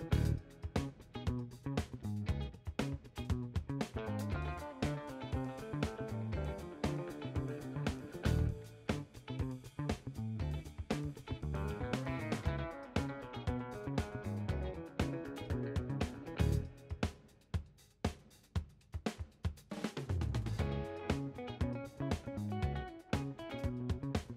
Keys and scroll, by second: 2.3 2, 2.6 Return, 4.7 3, 5.4 Return, 14.3-15.8 typing, 16.0 Return, 19.1 Return, 22.5 Home, 22.6-24.3 typing.